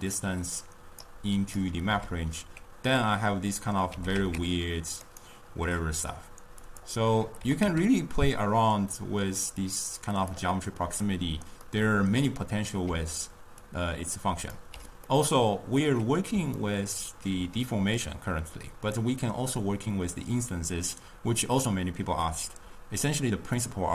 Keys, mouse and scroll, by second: 0.2 click, 1.5 click, 2.0 m, 3.0-4.1 middle drag, 4.1 g, 6.7 click, 8.0 g, 12.0-13.1 middle drag, 13.1-13.7 d, 14.1 click, 14.8 d, 15.2-18.1 middle drag, 18.1 click.